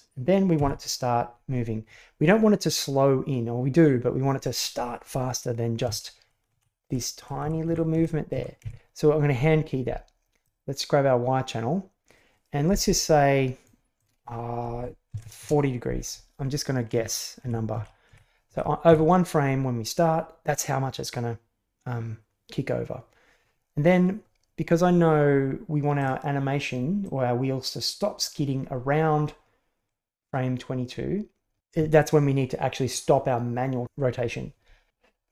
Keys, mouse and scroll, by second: 0.5 Right, 6.5 Left, 6.8 Right, 7.1 Left, 7.4 Right, 7.7 Left, 7.9 Right, 8.3 Left, 8.6 Right, 10.4-13.6 drag, 14.1-15.9 drag, 17.0 Left, 17.4 Right, 17.7 Left, 18.1 Right, 18.5 Left, 18.9 Right, 25.9-28.2 drag.